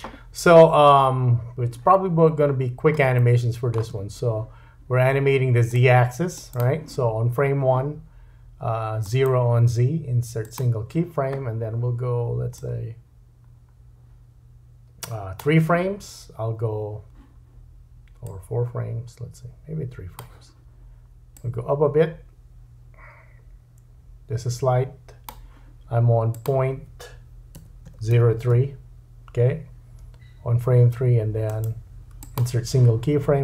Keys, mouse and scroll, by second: 2.5-3.0 scroll up 2, 3.2-3.9 shift+drag, 3.2 shift+middle click, 4.4-5.6 scroll up 1, 5.6-6.6 drag, 6.6-9.0 middle drag, 9.0-12.6 right drag, 12.6-18.2 drag, 26.3 click, 31.5 right click.